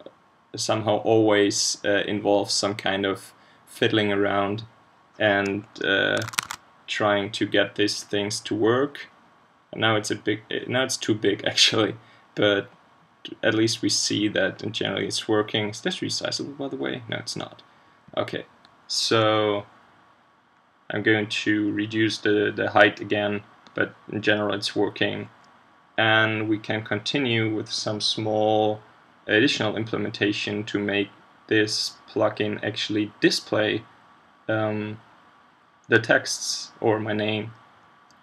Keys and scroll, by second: 6.2 super+Tab, 6.4 super+Tab.